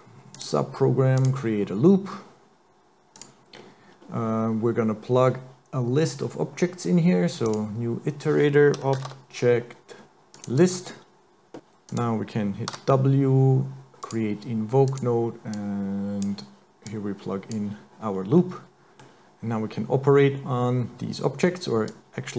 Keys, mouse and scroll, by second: 3.6 scroll up 4, 4.0 scroll down 1, 7.5 click, 11.9 click, 12.7 w, 15.6 click, 16.9 click, 18.4 middle click, 21.9 click.